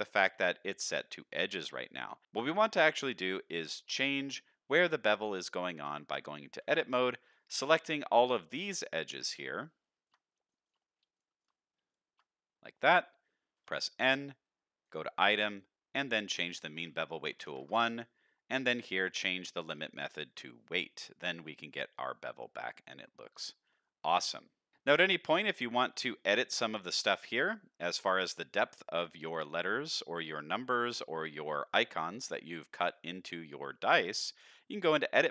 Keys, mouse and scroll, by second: 2.2 Tab, 2.2 shift+click, 2.5 middle click, 6.0 Tab, 7.2 shift+click, 7.8 shift+click, 8.1 middle click, 8.6 shift+click, 9.3 shift+click, 9.6 shift+middle click, 10.1 shift+click, 10.2 middle click, 10.6 shift+click, 10.8 middle click, 11.1 shift+click, 11.5 middle click, 11.8 shift+click, 12.2 middle click, 14.8 click, 16.4-17.8 drag, 19.1-20.4 drag, 21.0 middle click, 21.4 Tab, 21.6-21.9 middle drag, 22.2-22.6 middle drag, 22.8-23.3 middle drag, 23.4 shift+middle drag, 23.8-24.7 middle drag, 24.9 middle drag, 25.7 shift+middle drag, 26.1 scroll up 2, 26.4-26.7 middle drag, 27.2-27.8 middle drag, 28.4-29.8 middle drag, 30.1 shift+middle drag, 30.7-31.1 middle drag, 31.8-32.6 middle drag, 32.7-34.6 middle drag, 34.8 Tab, 35.1 middle click.